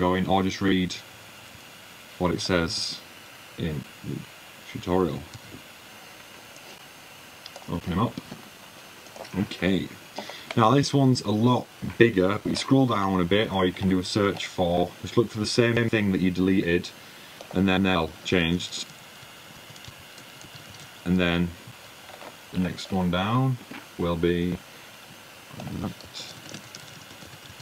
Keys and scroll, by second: 3.2-4.0 typing, 16.6-19.2 typing, 20.6-21.3 typing, 24.2-26.7 typing.